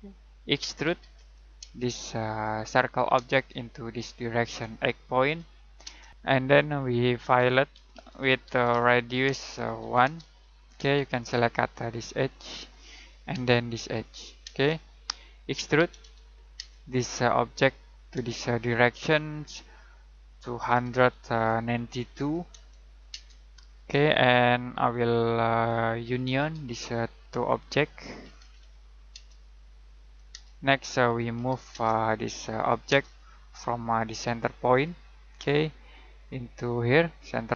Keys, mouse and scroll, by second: 0.5-1.6 typing, 2.6 click, 3.1 space, 5.2-10.7 typing, 6.1 scroll up 1, 11.1-12.7 scroll up 1, 12.7 click, 13.3 space, 14.0 click, 14.4 space, 15.5-16.5 typing, 17.6 click, 18.2 space, 18.8-19.4 scroll down 1, 19.4 middle click, 20.6-22.1 typing, 25.2-26.7 typing, 27.3 Escape, 28.0-29.1 typing, 29.4 click, 30.3 space, 31.3 m, 31.7 space, 32.0 click, 32.9 space, 33.1-34.7 scroll up 1, 34.7 click, 35.0-35.5 scroll down 1, 35.5 middle click, 36.0-37.5 scroll up 1.